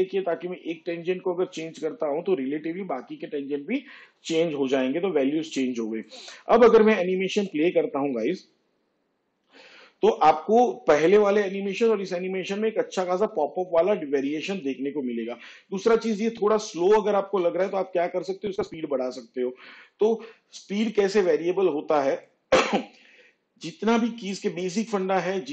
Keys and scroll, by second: 9.5 space, 19.6 space.